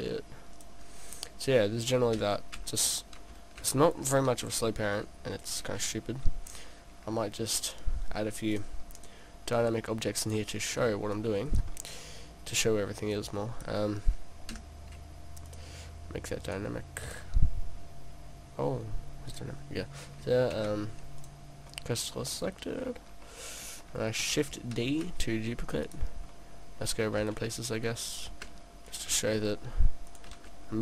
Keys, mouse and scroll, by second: 0.7 click, 2.2 click, 2.2 p, 6.7 middle click, 7.6 middle click, 8.6 click, 9.7 click, 11.7 click, 11.7 middle click, 12.9 middle click, 13.2 click, 13.8 click, 14.5 s, 14.6 s, 15.6 click, 16.5 click, 17.1 click, 20.7 shift+s, 21.7 middle click, 22.4-23.4 scroll down 3, 23.2 middle click, 24.8 shift+d, 25.9 click, 26.3 middle click, 27.3 shift+d, 28.2 click, 28.3 shift+d, 29.0 click, 29.2 shift+d, 30.2 click, 30.4 shift+d.